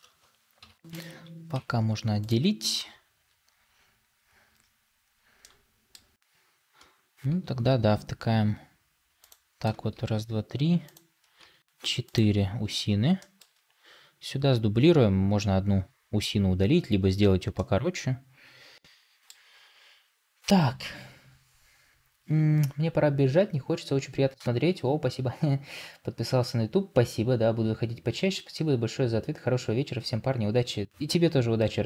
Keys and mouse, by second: 0.5 p, 1.4 Tab, 5.3 middle click, 9.8 shift+d, 13.1 shift+middle click, 17.4-19.2 middle drag.